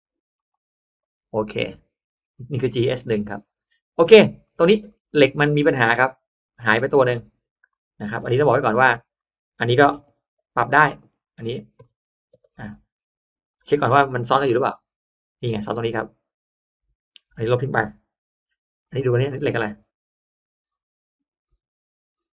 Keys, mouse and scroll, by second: 0.3 click, 1.3-1.7 scroll down 1, 2.1-2.8 scroll up 1, 3.2-4.0 scroll down 2, 3.3 space, 4.2-5.0 scroll up 2, 5.0-5.7 middle drag, 5.2 space, 6.2 click, 6.4 click, 6.9 click, 7.1 click, 7.3 click, 8.1 click, 8.1 m, 8.5 m, 8.7 space, 9.1 click, 9.9 click, 10.0-12.5 typing, 10.9 click, 11.7 click, 12.4 middle click, 12.5 click, 12.9 middle click, 13.4 click, 14.4 click, 14.4 m, 18.7 click, 19.1 space, 19.3 middle click, 20.8 right click, 21.7 right click.